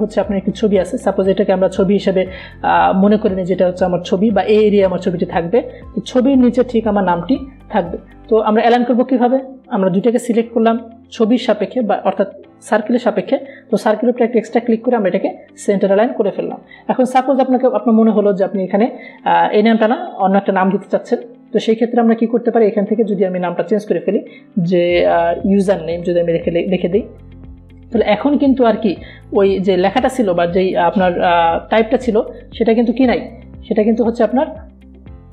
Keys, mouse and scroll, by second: 7.1-15.2 drag, 15.2 click, 22.7 t, 23.6 click, 25.0 ctrl+a, 27.2-29.4 typing, 30.3 click.